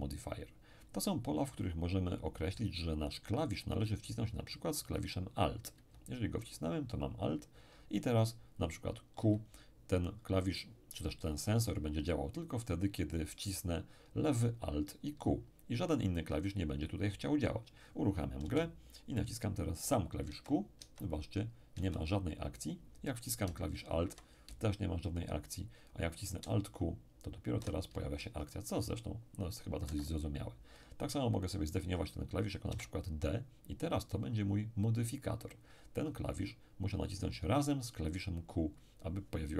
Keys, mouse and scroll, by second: 4.9 click, 8.6 click, 9.2 q, 18.4 p, 20.3 q, 20.8 q, 21.7 q, 26.4 alt+q, 26.6 alt+q, 29.8 Escape, 31.8 click, 32.7 d.